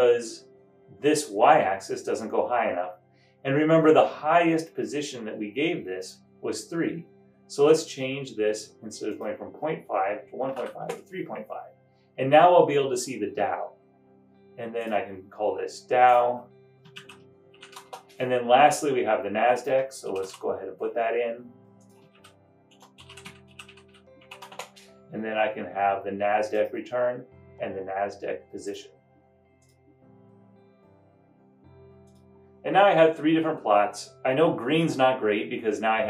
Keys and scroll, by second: 10.7 typing, 10.8 Return, 16.9-18.1 typing, 20.1 typing, 20.2 super+c, 20.4 super+v, 22.3-24.5 typing.